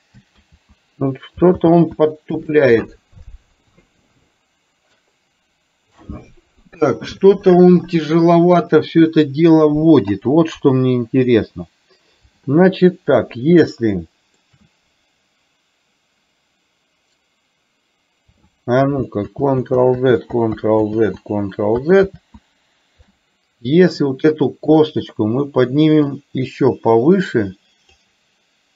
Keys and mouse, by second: 0.7 ctrl+z, 2.0 ctrl+z, 13.9-14.6 shift+middle drag, 19.9 ctrl+z, 20.4 ctrl+z, 26.4-28.1 drag.